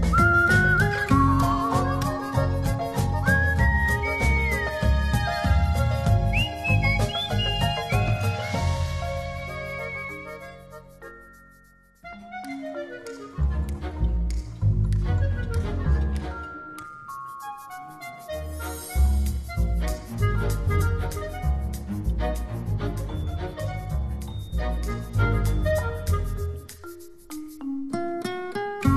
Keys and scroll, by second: 21.8 shift+Right, 22.3 shift+Down, 22.7 shift+Right, 24.0 shift+Down.